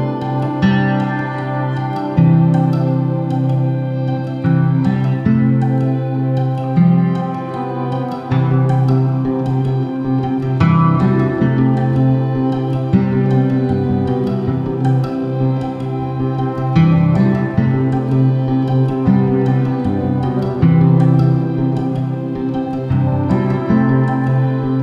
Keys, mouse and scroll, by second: 1.0 click, 1.1 g, 3.9 click, 4.1 s, 6.4 click, 6.6-9.5 middle drag, 7.4 g, 9.5 click, 9.9 scroll down 1, 10.1-11.9 middle drag, 11.9 click, 12.7 s, 13.8 click, 14.1 g, 15.2 click, 15.4-17.7 middle drag, 16.3 scroll down 1, 16.8-17.2 scroll down 1, 17.7 click, 18.0 shift+d, 19.3 click, 19.5 g, 20.5 click, 21.5 r, 22.2 Escape, 22.3 r, 23.1 Escape, 23.2 r, 24.3 Escape, 24.5 r.